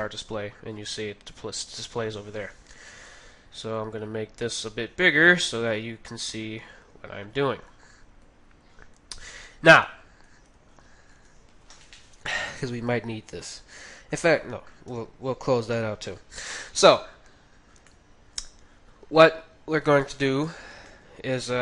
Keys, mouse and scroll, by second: 3.1 click, 4.1 click, 7.9-10.1 drag, 10.4 n, 10.8 n, 11.1 t, 13.6-16.3 middle drag, 14.9 n, 17.0-19.7 middle drag, 19.8 KP_3, 20.2-21.6 middle drag.